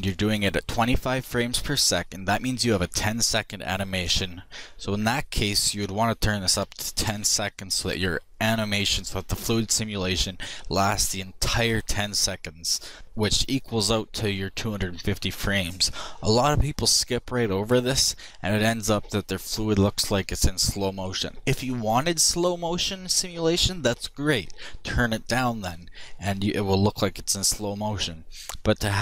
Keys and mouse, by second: 4.8-6.5 drag, 6.8-29.0 middle drag.